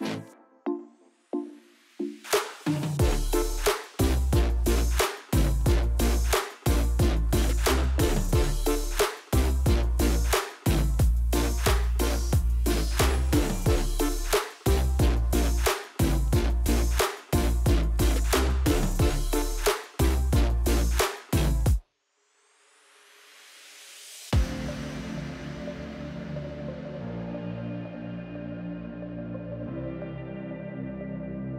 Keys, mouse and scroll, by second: 1.0 s, 3.0 click, 3.7 Tab, 4.0 click, 4.4 click, 4.9-6.0 drag, 6.3-7.1 scroll down 1, 7.1 click, 7.4 click, 8.4 click, 8.7 click, 9.0 scroll down 1, 9.2 scroll up 1, 9.4-10.4 shift+middle drag, 10.4 shift+a, 12.3 s, 13.2 click, 13.3-13.6 scroll up 1, 13.6-14.7 shift+middle drag, 14.7 s, 16.1-17.6 drag, 17.8-19.3 drag, 19.6 Tab, 19.8-20.8 middle drag, 20.8 click, 21.0 click, 21.5 click, 22.4 click, 22.8 click, 23.1 Delete, 24.1 middle click, 24.6 click, 24.7 Delete, 25.3-26.3 middle drag, 26.3 click, 27.4 click, 27.6 click, 28.7-29.4 scroll down 1, 29.4 KP_1, 30.8 Escape, 31.2 a.